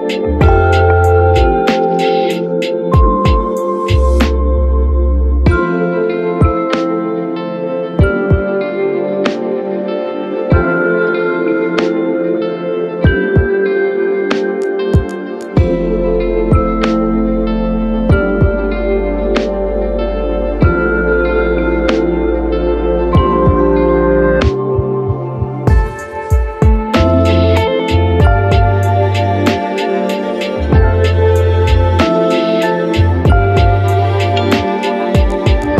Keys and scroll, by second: 0.4 ctrl+d, 6.2 Delete, 16.7-17.6 typing, 29.2 ctrl+d, 30.1 d, 30.5 ctrl+1, 30.9 ctrl+1, 33.3 Delete.